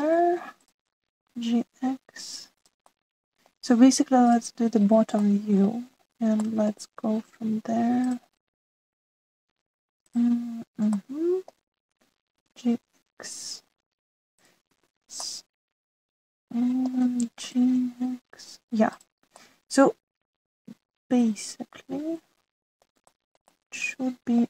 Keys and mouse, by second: 2.2 g, 3.8 middle click, 6.1 shift+middle click, 7.3 shift+middle click, 9.0 click, 11.8 shift+middle click, 13.3 g, 15.8 ctrl+z, 16.2 click, 16.6-17.9 middle drag, 18.4 g, 20.4-23.7 middle drag, 24.1 shift+middle click.